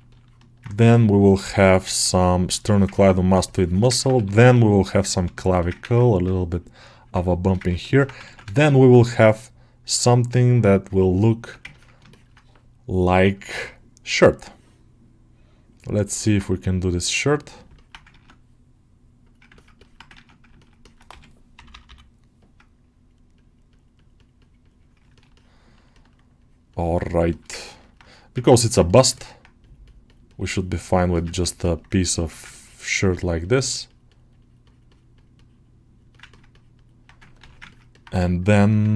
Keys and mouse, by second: 0.0 ctrl+middle click, 1.3-2.6 drag, 1.3 2, 2.6 ctrl+alt+shift+middle click, 3.3 shift+click, 3.8 ctrl+alt+middle click, 5.2 shift+click, 5.8-7.5 ctrl+drag, 7.5 ctrl+middle click, 7.8 ctrl+middle click, 8.1 ctrl+Tab, 8.4 shift+a, 11.2 Tab, 11.6 ctrl+alt+middle click, 11.9 shift+middle click, 13.3 click, 16.0 alt+middle click, 17.6 alt+middle click, 17.9 ctrl+Tab, 19.4 alt+middle click, 19.6 middle click, 20.4 middle click, 20.7 middle click, 20.9 g, 21.4 ], 22.2 click, 23.8 click, 24.2-25.7 middle drag, 25.8 alt+middle click, 26.3-27.3 middle drag, 27.4 ctrl+middle click, 27.7 alt+middle click, 28.3 ctrl+alt+middle click, 29.0 middle click, 30.4 shift+middle click, 31.2 ctrl+alt+middle click, 31.5 alt+middle click, 32.4 ctrl+alt+middle click, 33.3-34.5 middle drag, 36.0 ctrl+middle click, 36.4 middle click, 37.3 ctrl+r, 37.6 ctrl+middle click, 37.8 alt+middle click, 38.0 2, 38.5 alt+middle click, 38.8 ctrl+alt+middle click.